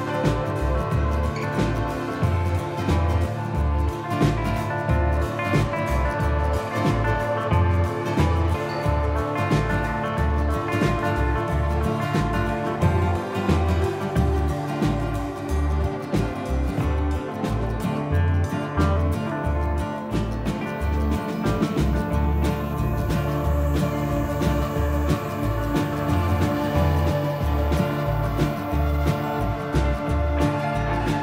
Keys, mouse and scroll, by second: 0.4 alt+h, 0.9 middle click, 1.6 click, 2.4-3.2 scroll up 1, 3.3 click, 3.9 click, 5.4 middle click, 5.8 Tab, 6.7 a, 7.5 s, 9.2 click, 10.4-11.0 scroll up 7, 11.0 middle click, 11.4 shift+middle click, 11.8-12.1 scroll up 2, 12.1 middle click, 12.8 middle click, 14.0 click, 15.2 middle click, 15.9 click, 18.3 scroll down 3, 18.7 middle click, 19.1 middle click, 19.9 click, 20.7 click, 23.9 click, 26.8 KP_3, 27.5-28.5 scroll up 1, 28.5 middle click, 29.4-29.8 scroll up 4, 29.8 middle click, 30.5 s.